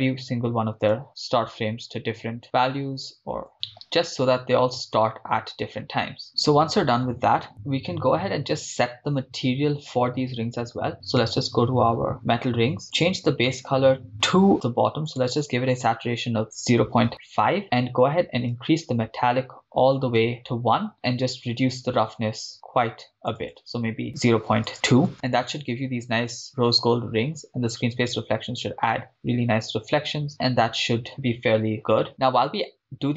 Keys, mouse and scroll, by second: 0.8-3.5 drag, 1.9 BackSpace, 3.8 right click, 4.9-6.3 drag, 7.5-10.5 drag, 11.2 click, 12.8 scroll down 3, 12.9-13.6 drag, 18.5-20.2 drag, 20.9-21.6 scroll down 3, 21.7-23.7 drag, 25.1 click, 25.4-25.8 scroll up 4, 26.5 scroll up 5, 29.2-31.7 scroll down 8.